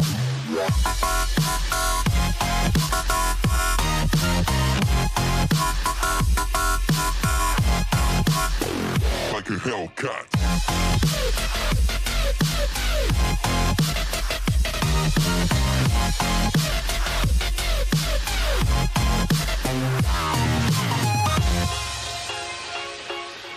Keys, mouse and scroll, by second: 0.3 click, 2.2 click, 2.9-3.9 scroll down 3, 3.9 alt+z, 4.5 click, 6.2 click, 8.3 click, 9.5 click, 10.5 click, 14.1 scroll up 3, 15.1 click, 15.6 scroll down 1, 16.6 g.